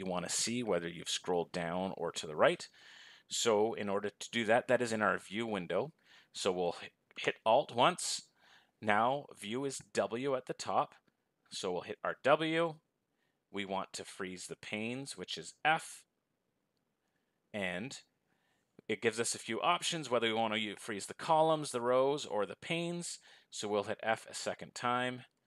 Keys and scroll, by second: 7.8 alt+f.